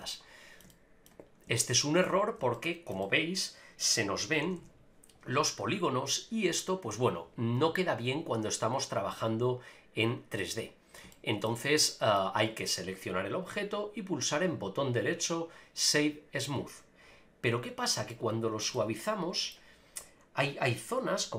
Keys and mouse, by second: 0.1-0.6 shift+middle drag, 0.7 middle click, 1.6-2.0 shift+middle drag, 2.5-2.9 shift+middle drag, 3.0 middle click, 4.4 a, 4.6 a, 9.3 click, 10.4 middle click, 11.1 shift+middle click, 11.6 middle click, 13.0-14.5 drag, 14.5-16.5 right drag, 18.1-18.6 shift+middle drag, 18.7 middle click.